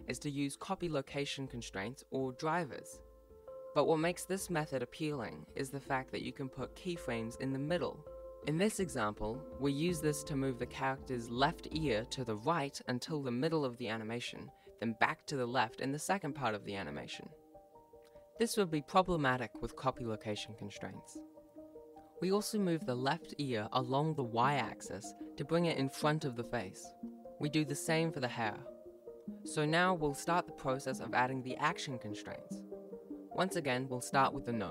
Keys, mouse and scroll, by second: 0.0-0.1 typing, 1.3 i, 1.9 click, 2.4 a, 2.6 a, 2.8 t, 3.2 alt+a, 3.3 click, 6.3 ctrl+s, 6.6 click, 6.8 right click, 7.1-10.5 typing, 7.2 click, 8.3 right click, 8.5 right click, 9.0 click, 9.3 alt+g, 9.5 right click, 9.7 click, 10.7 click, 10.8 alt+a, 10.8 ctrl+s, 11.0 click, 11.1 click, 11.8 click, 12.6 right click, 12.7 g, 13.1 i, 13.3 click, 13.8 click, 13.9 click, 14.1 right click, 14.4 shift+Left, 14.4-17.8 typing, 14.7 click, 14.8 scroll up 1, 15.5 click, 15.8 click, 16.4 right click, 16.8 click, 17.9 click, 18.4 alt+g, 18.9-24.5 typing, 19.5 click, 20.2 click, 21.4 click, 21.7 right click, 22.0 click, 22.6 click, 22.9 click, 23.1 click, 23.4 shift+right click, 23.6 click, 23.7 ctrl+s, 23.7 Left, 23.8 ctrl+s, 23.8 right click, 24.0 scroll down 1, 24.4 ctrl+s, 24.9 right click, 25.6 right click, 26.8 shift+right click, 28.1 ctrl+shift+c, 32.4 right click, 34.1 click.